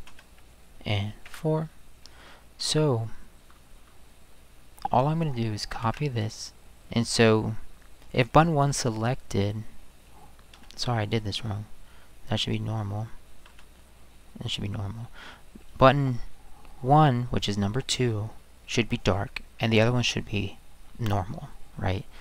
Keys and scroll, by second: 0.1 space, 1.2 4, 5.8 ctrl+c, 10.5 ctrl+c, 10.6 space, 13.5 space.